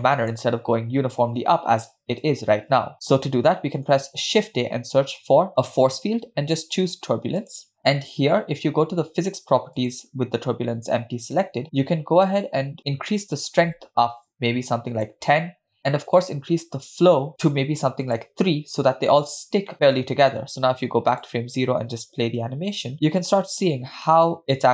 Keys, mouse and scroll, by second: 0.0 middle click, 2.3 space, 2.9 space, 3.3 middle click, 4.4 shift+a, 9.8 click, 13.3-15.1 drag, 16.2-18.2 drag, 19.7 middle click, 21.2 click, 22.5 space, 24.3-24.7 middle drag.